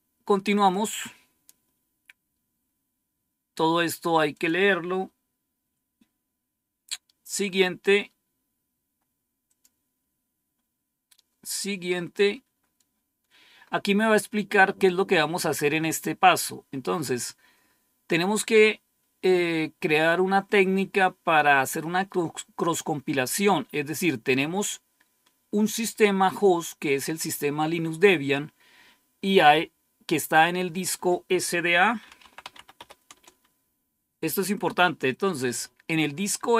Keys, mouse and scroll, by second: 0.5 click, 4.3 click, 7.4-8.3 scroll up 1, 9.4 click, 12.1-13.6 scroll down 1, 13.6-21.2 scroll up 1, 21.2-22.8 scroll down 1, 22.8-23.8 scroll down 1, 23.8-24.3 scroll down 1, 31.7-33.2 typing.